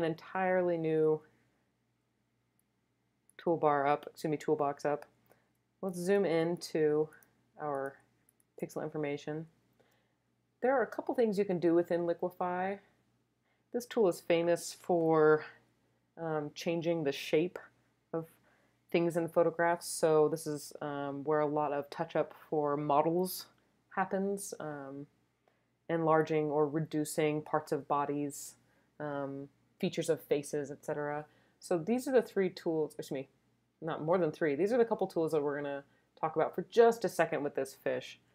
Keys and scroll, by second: 6.2 super+space, 6.8 super+space, 8.5 space.